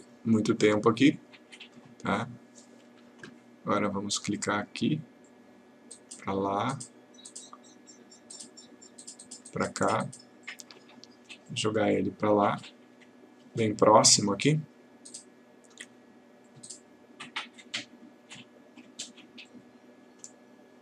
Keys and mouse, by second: 1.6 click.